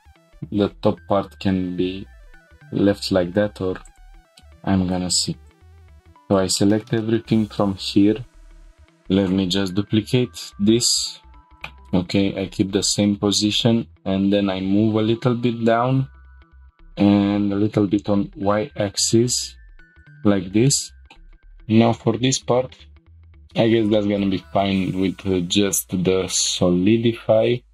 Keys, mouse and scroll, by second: 3.9 click, 4.2 scroll down 2, 4.4 middle click, 5.5 ctrl+click, 5.9 middle click, 6.5 shift+middle click, 7.0 middle click, 7.6 scroll up 1, 8.6 scroll down 1, 8.6 shift+d, 11.6 right click, 12.6 g, 12.8 z, 16.5 shift+click, 16.7 x, 17.7 y, 20.0 shift+click, 20.7 shift+middle click, 21.2 scroll up 1, 21.2 f, 21.3 middle click, 22.2 scroll up 1, 22.7 scroll up 1.